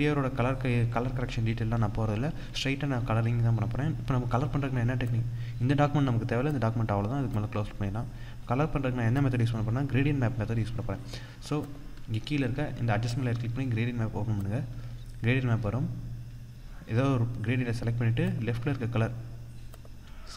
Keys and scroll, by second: 2.0 ctrl+0.